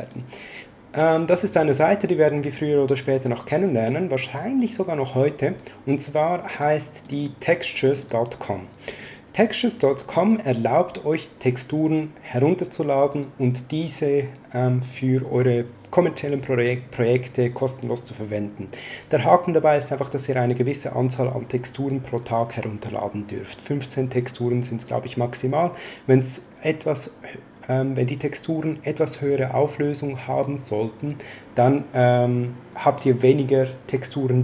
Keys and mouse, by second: 0.0 click, 2.5 click, 6.5 click.